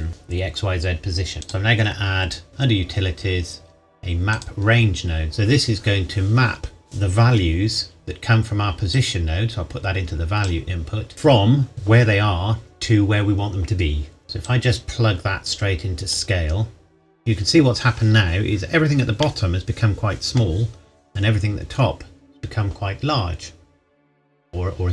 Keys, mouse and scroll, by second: 1.2 scroll up 1, 1.3 click, 4.3 click, 7.4-8.9 scroll up 1, 8.9 click, 14.4 click, 19.1 scroll up 1, 19.3 middle click.